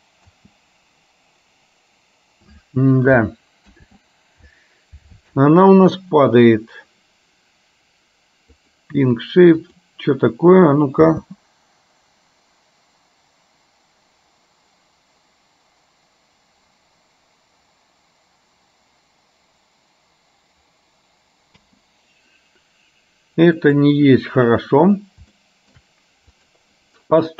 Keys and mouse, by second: 0.4 space, 4.1 ctrl+z, 8.7-9.9 drag, 11.3 space, 21.7 space, 23.9 click, 25.4 shift+middle click, 26.3 click.